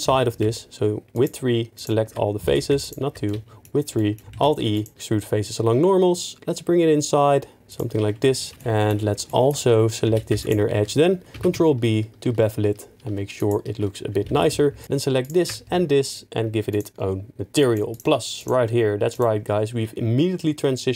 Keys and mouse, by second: 0.0 3, 0.4 2, 1.1 alt+click, 1.7 alt+click, 2.4 3, 2.8 alt+click, 4.3 alt+e, 8.5 middle click, 9.2 shift+middle click, 10.1 2, 11.4 ctrl+b, 13.4 shift+click, 14.3 3, 14.8 alt+shift+click, 16.7 click, 20.5 middle click.